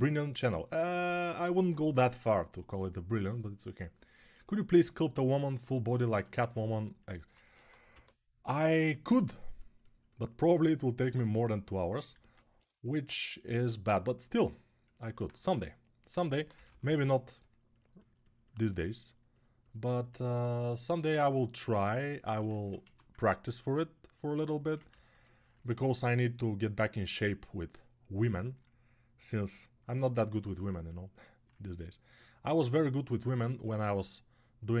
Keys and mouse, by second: 7.2-8.3 typing, 15.8-16.8 typing, 22.6-34.8 ctrl+right drag, 22.6 1.